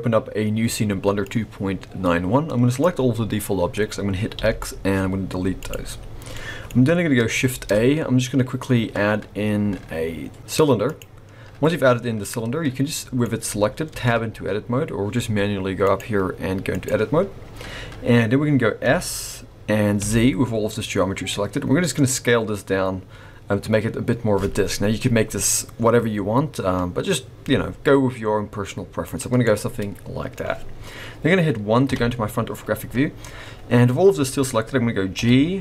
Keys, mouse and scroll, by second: 1.2 click, 4.4 x, 6.3 middle click, 7.5 shift+a, 11.5-12.8 scroll up 4, 12.8 middle click, 13.2-13.9 scroll up 1, 13.9 Tab, 15.8 click, 18.8 s, 29.4 middle click, 31.8 KP_1, 32.8-33.4 scroll up 4, 33.6-34.1 scroll down 3, 35.1 g.